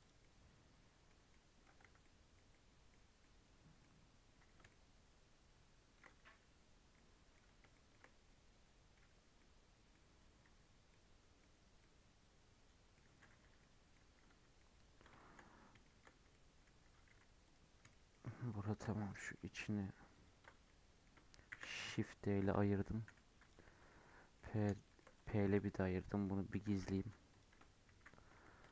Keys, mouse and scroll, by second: 0.2-1.8 middle drag, 1.8 Tab, 2.0-2.3 scroll down 1, 2.5-4.1 middle drag, 4.1-4.4 scroll up 3, 4.7-6.2 shift+middle drag, 6.2 Tab, 6.7 scroll down 1, 6.9-10.4 middle drag, 10.4 Tab, 10.9-13.0 middle drag, 13.0 Tab, 13.4 3, 13.4 scroll down 1, 13.6 middle click, 14.2 Tab, 14.5 middle click, 15.4-15.8 scroll up 2, 15.8 shift+middle click, 16.8 Tab, 17.0 3, 17.4 click, 17.9-20.1 shift+middle drag, 20.1 ctrl+click, 20.6 middle click, 21.5 shift+d, 23.0 p, 23.6 Tab, 23.8-24.2 middle drag, 24.2 scroll down 1, 24.3-25.1 middle drag, 25.1 click, 25.4 click, 25.9 middle click, 26.5 h, 26.9 Tab, 27.2 click, 27.5 Tab, 28.0 a, 28.5 Tab.